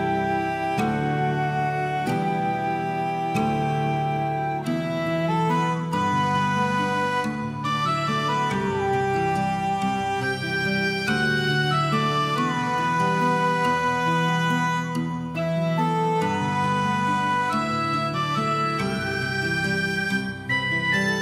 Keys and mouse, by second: 0.8 click, 1.0 click, 1.1 g, 1.3 click, 1.6 alt+middle click, 2.1 Tab, 2.3 middle click, 2.8 alt+click, 3.0 alt+middle click, 3.7 Tab, 3.8 click, 4.0 g, 4.9 click, 5.1 click, 5.2 g, 6.2 click, 6.4 click, 6.5 g, 6.9 click, 7.2 g, 7.6 click, 7.8 click, 8.5 g, 8.9 click, 9.3 g, 9.8 click, 10.0 middle click, 10.4 alt+middle click, 10.6 alt+middle click, 11.0 Tab, 11.2 middle click, 11.6 middle click, 12.9 shift+middle click, 13.3 middle click, 14.0 shift+click, 14.3 shift+click, 14.7 alt+middle click, 14.8 alt+middle click, 15.0 shift+middle click, 15.3 shift+middle click, 15.7 shift+middle click, 16.3 shift+middle click, 16.4 middle click, 16.9 alt+middle click, 17.3 Tab, 17.3 middle click, 18.1 click, 18.2 alt+middle click, 18.4 alt+z, 19.3 g, 20.2 click, 20.4 alt+z, 20.5 middle click, 21.0 middle click.